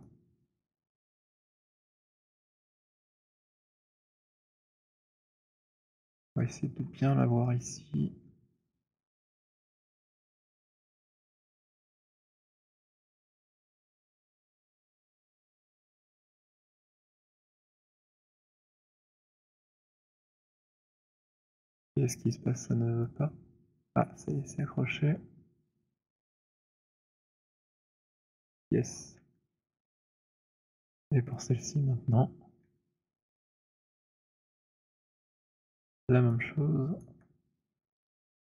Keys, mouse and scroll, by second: 0.2 alt+click, 0.2 alt+middle click, 0.9 alt+click, 1.6 alt+middle click, 2.4 alt+click, 3.2 alt+right click, 4.0 click, 5.5-6.1 scroll, 6.1 alt+middle click, 6.6-7.0 scroll, 7.5-8.0 alt+scroll, 8.5-9.4 alt+scroll, 9.4 alt+middle click, 9.4-9.8 alt+scroll, 10.4-11.4 alt+scroll, 11.4-13.0 c, 13.3 middle click, 13.3 c, 14.3 middle click, 15.1-20.9 typing, 17.8 middle click, 20.9 middle click, 22.3-28.4 typing, 28.2 scroll, 29.1-29.8 scroll, 30.0-31.1 alt+middle click, 30.2 middle click, 30.5 middle click, 30.7 middle click, 31.6 click, 33.8 alt+middle click, 34.7 alt+middle click, 35.5 alt+click, 36.2 alt+middle click, 37.2 alt+click, 38.1 alt+right click, 38.1 c.